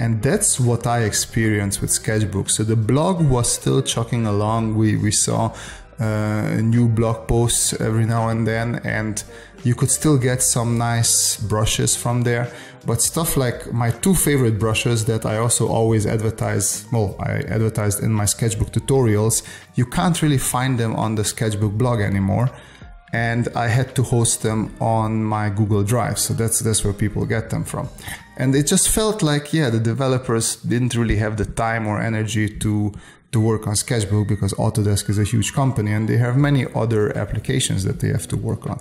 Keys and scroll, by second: 1.4 space, 2.4 space, 3.4 space, 6.4 space, 9.4 space, 11.5 space, 12.2 space, 13.8 space, 14.7 space, 17.7 space, 18.5 space, 19.3 space, 20.1 space, 21.7 space, 22.7 space, 23.6 space, 25.6 space, 26.7 s, 28.2 space, 29.5 space, 30.4 space, 31.0 s, 32.1 space, 32.7 s, 35.1 space, 36.4 space, 37.1 space, 38.3 s.